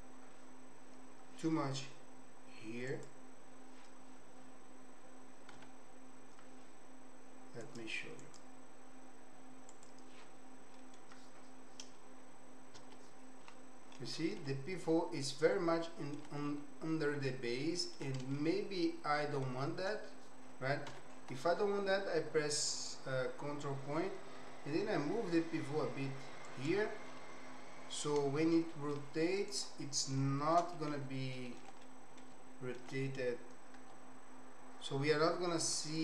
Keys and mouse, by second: 3.0 click, 5.7 h, 8.2 click, 9.7 click, 10.8 middle click, 12.8 KP_Decimal, 14.4-16.2 middle drag, 16.4-18.0 middle drag, 18.4-19.5 shift+middle drag, 21.0 ctrl+., 24.4 g, 27.2-29.0 middle drag, 29.5 click, 30.3 shift+click, 30.7 alt+click, 31.5 ctrl+alt+click, 31.8 click, 33.8 g.